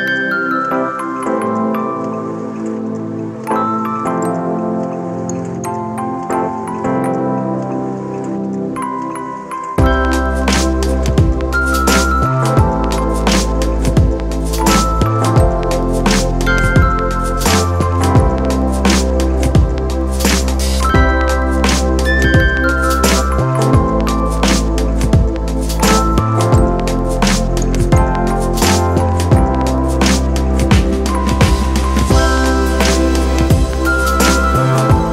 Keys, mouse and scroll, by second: 5.3 ctrl+d, 22.7 alt+click.